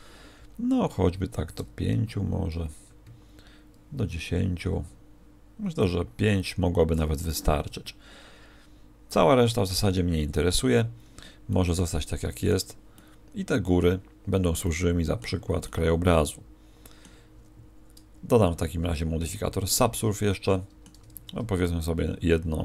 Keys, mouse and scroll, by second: 11.5 middle click, 12.9 middle click, 18.7 ctrl+2, 20.3 middle click, 21.1 ctrl+1, 21.6 middle click.